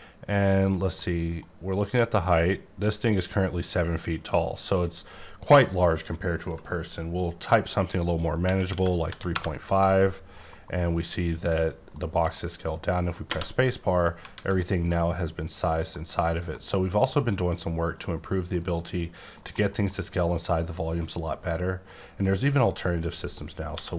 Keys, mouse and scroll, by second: 1.3 middle click, 4.6 click, 8.3 KP_3, 8.7 KP_Decimal, 9.1 KP_5, 9.3 KP_Enter, 10.4 middle click, 11.9 middle click, 13.8-14.6 scroll up 4, 14.3 alt+a, 15.8 middle click, 17.8 scroll up 1, 18.0 middle click, 19.3 middle click, 21.1 middle click, 22.0-22.5 scroll down 2, 22.5 click, 23.6 x.